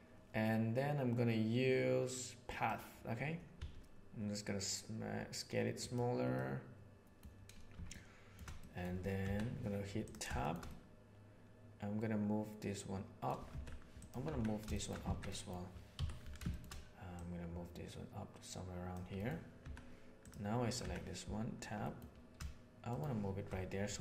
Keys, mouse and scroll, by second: 3.5 s, 6.3 middle click, 7.8-8.3 shift+middle drag, 8.5 middle click, 9.2 Tab, 10.3 shift+middle click, 10.6-12.0 middle drag, 12.2-13.2 middle drag, 13.4 Tab, 13.9 click, 14.2 Tab, 14.7 shift+middle click, 15.0 alt+a, 15.2 middle click, 15.9 l, 16.4 shift+middle click, 17.1-18.8 drag, 19.1 middle click, 19.6 Tab, 20.1 click, 20.7 Tab, 21.7 middle click.